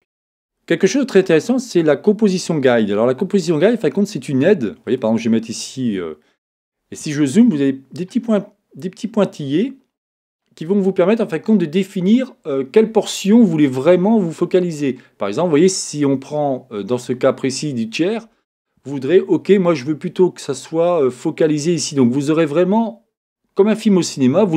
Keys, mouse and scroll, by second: 2.6-4.6 drag, 6.3-8.3 middle drag, 10.1-12.0 middle drag.